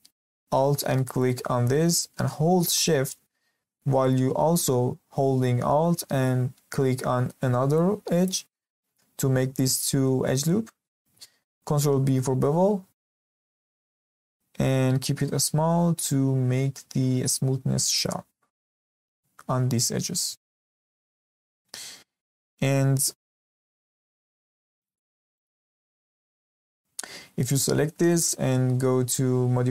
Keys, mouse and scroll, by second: 1.1 alt+click, 8.1 alt+shift+click, 11.6 ctrl+b, 18.8-20.0 scroll down 2, 20.0-20.4 scroll down 6, 20.4 shift+middle click, 20.8-21.1 scroll up 1, 21.1-22.6 shift+middle drag, 22.6 scroll down 2, 22.8-23.2 scroll up 1, 23.2 Tab, 24.8 click, 25.3 click, 26.3-27.5 scroll down 2, 27.5-28.1 scroll up 3, 28.1-29.7 shift+middle drag.